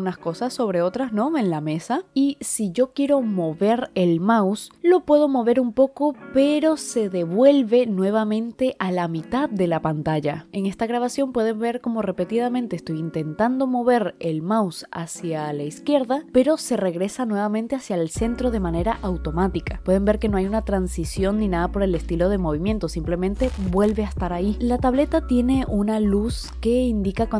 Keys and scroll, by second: 24.2-26.2 typing.